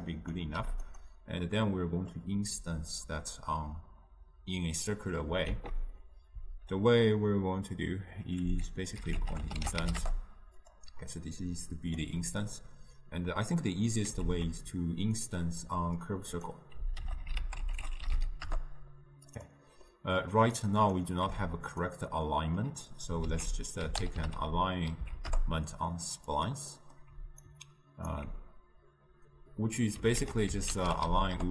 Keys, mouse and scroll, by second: 12.1-22.4 drag, 22.4-25.4 middle drag, 25.4 ctrl+a, 28.2-31.5 alt+right drag.